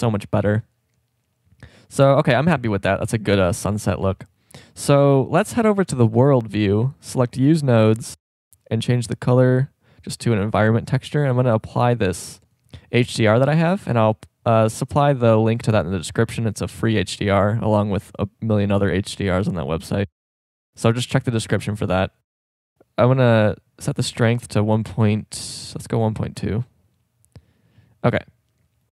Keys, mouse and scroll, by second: 2.6 middle click, 4.0 z, 8.8-10.1 drag, 11.4 click, 13.8 KP_0, 14.9-16.8 drag, 18.8 middle click, 20.8-22.1 drag, 23.3-25.2 drag, 27.7 z.